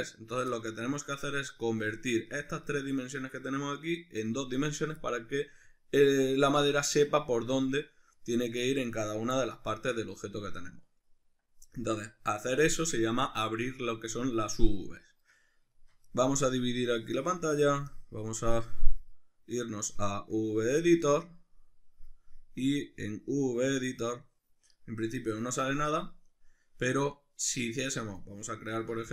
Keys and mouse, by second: 1.2 right click, 2.3-16.8 shift+middle drag, 16.8-28.2 drag, 28.2-28.7 shift+middle drag, 28.7 click, 29.0 shift+a.